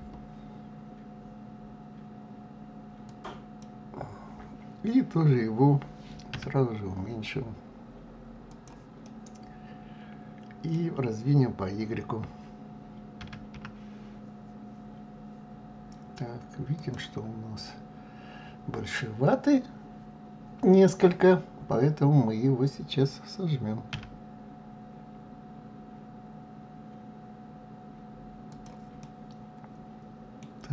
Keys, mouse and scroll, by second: 6.4 s, 9.0-12.0 middle drag, 13.2 s, 17.4-18.7 scroll up 4, 23.9 s, 29.0-30.7 middle drag.